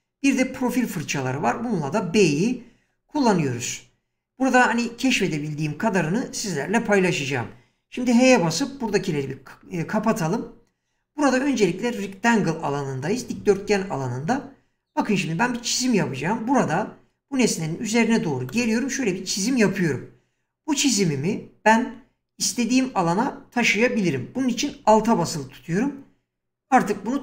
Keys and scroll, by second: 8.8 h.